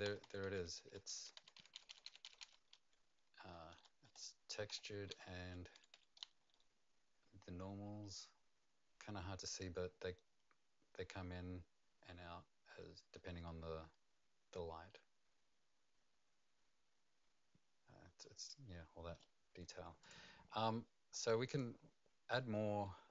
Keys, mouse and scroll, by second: 0.0-11.5 typing, 12.8-20.5 typing, 20.0 click, 21.4 click, 22.8 middle click.